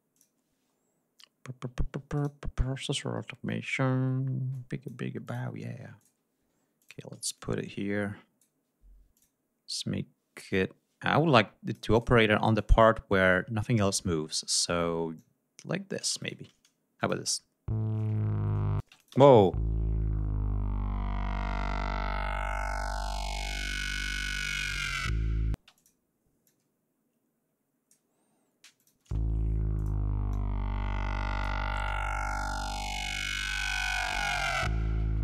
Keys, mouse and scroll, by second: 0.1 click, 2.1 click, 3.2 scroll down 1, 4.5 click, 5.2 click, 6.0 click, 6.5 d, 6.8 click, 7.3-8.6 drag, 9.1 click, 9.7-12.2 drag, 12.5-14.8 drag, 15.1-16.4 drag, 16.2 shift+right click, 17.0 click, 17.2 space, 17.4 ctrl+scroll down 2, 17.8 ctrl+scroll up 2, 18.8 space, 18.9 click, 25.5 space, 25.7 click, 26.4-28.1 drag, 28.8 click, 29.0 space, 29.2 ctrl+scroll up 2, 29.7 ctrl+click, 30.3-31.6 ctrl+drag, 32.1 ctrl+scroll down 2, 35.0 g, 35.1 ctrl+scroll down 2.